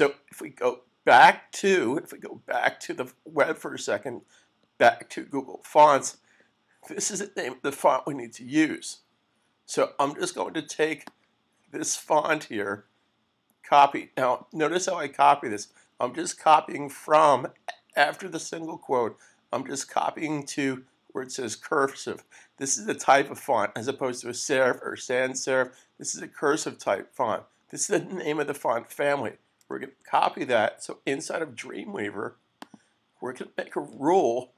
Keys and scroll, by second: 30.0 super+c.